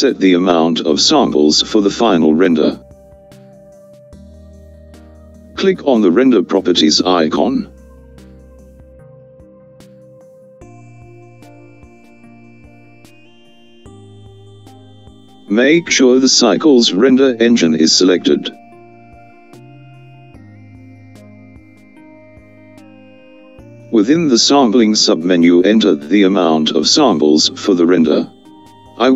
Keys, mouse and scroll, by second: 14.5 click, 25.8-29.1 drag.